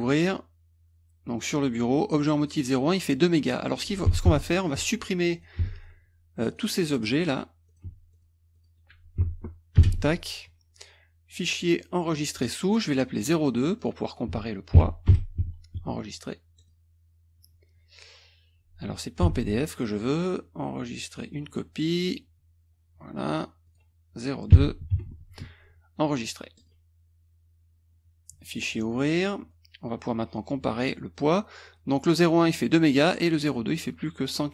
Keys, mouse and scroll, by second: 2.5 click, 4.3 Escape, 4.6 click, 5.3 click, 5.7 shift+click, 6.6 click, 6.9 click, 7.7 shift+click, 8.2 shift+click, 8.5 shift+click, 9.8 Delete, 11.3 click, 12.2 click, 13.8 click, 14.7 KP_2, 15.1 Delete, 16.6 click, 19.3 Escape, 19.8 click, 21.3 click, 23.7 click, 24.5 KP_2, 24.9 Delete, 26.6 click, 28.6 click, 29.3 click, 31.8-33.1 drag, 33.5 click.